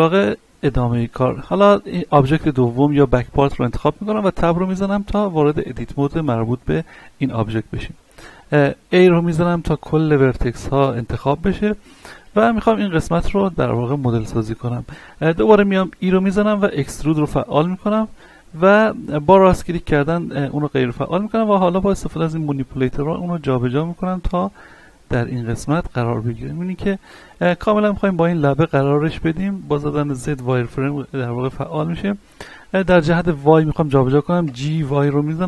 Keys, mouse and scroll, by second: 0.6-1.1 scroll up 1, 1.4-4.1 shift+middle drag, 4.1 Tab, 4.7-6.5 scroll up 1, 8.0 a, 8.4-9.0 scroll down 1, 9.0 middle click, 10.2-11.0 shift+middle drag, 11.0-12.2 scroll down 2, 12.2-12.8 scroll down 1, 12.8-13.2 scroll down 1, 13.2 scroll up 1, 13.3 shift+middle click, 13.8-15.6 scroll up 2, 16.0 e, 16.7 right click, 17.2-19.0 scroll down 2, 20.2 shift+middle click, 20.7 scroll up 1, 22.0-24.5 drag, 24.5 shift+middle click, 25.0-25.7 scroll up 1, 26.0 z, 26.3 scroll up 1, 26.9-28.9 shift+middle drag, 28.9-29.3 scroll up 1, 29.4 shift+middle click, 30.5-31.2 scroll down 1, 33.0 scroll up 1, 34.4 g.